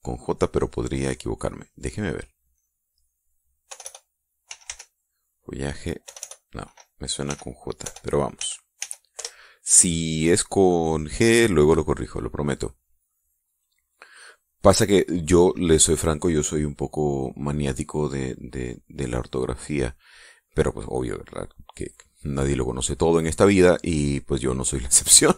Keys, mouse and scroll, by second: 2.9 click, 4.1 BackSpace, 4.9-7.3 drag, 5.1 e, 6.5 BackSpace, 7.7 h, 8.8 j, 9.2 e, 9.6 Return, 13.1-15.3 drag, 17.7 click, 18.2 click, 18.7 click, 19.1 click, 23.1 click, 23.7 click.